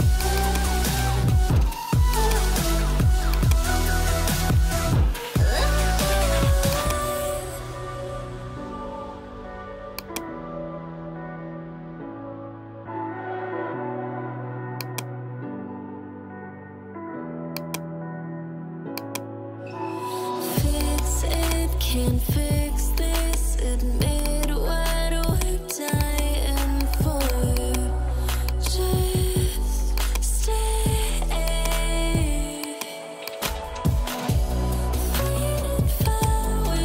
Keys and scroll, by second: 0.7 ], 6.0 [, 9.3 ], 14.2 ], 19.9 [, 21.6 ], 22.2 [, 24.2 ], 28.7 ].